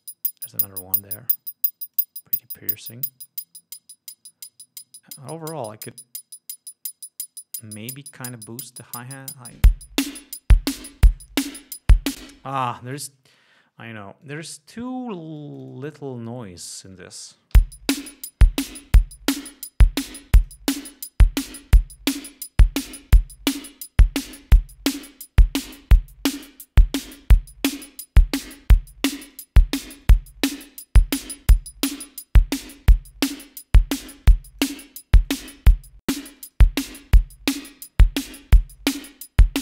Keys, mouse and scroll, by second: 1.4-2.0 scroll up 2, 2.3-3.7 drag, 5.7-8.6 drag, 9.0-10.1 drag, 12.5 space, 14.5 click, 15.7-16.4 drag, 17.9 l, 19.6-21.0 drag, 23.2-29.8 drag, 30.4-35.1 drag, 35.6 click, 36.5 click, 37.0 click, 38.9-39.4 drag.